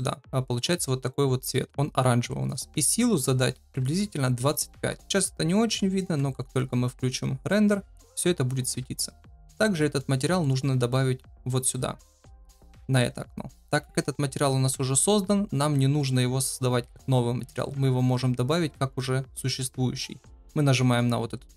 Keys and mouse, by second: 2.9-5.0 drag, 8.9-9.3 shift+middle drag, 9.7 middle click, 10.3 shift+middle drag, 11.4 click.